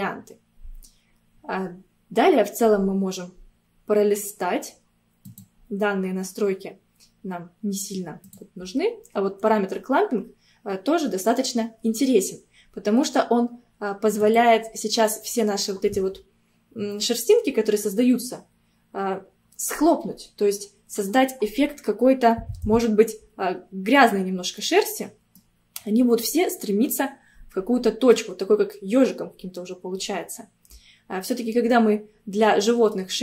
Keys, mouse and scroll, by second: 2.2-2.8 scroll down 1, 2.8 scroll down 1, 5.3 click, 5.9-6.3 scroll down 2, 8.3 click, 8.7-11.4 scroll down 2, 14.2-17.4 drag, 24.2-24.6 scroll down 1, 24.6-31.8 middle drag.